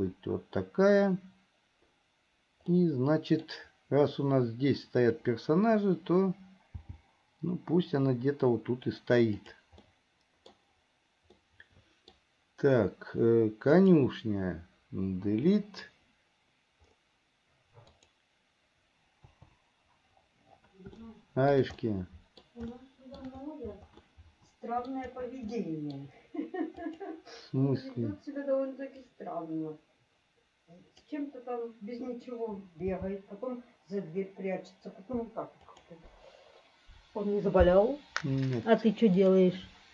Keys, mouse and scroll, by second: 2.9 middle click, 7.0 g, 10.0 middle click, 11.5 middle click, 13.9 click, 15.5 Delete, 18.1 click, 21.2 shift+middle click, 22.0 middle click, 23.0 shift+middle click, 24.2 middle click, 25.8 middle click, 26.9 click, 29.1 click, 29.5-31.3 drag, 33.1 g, 39.3 click.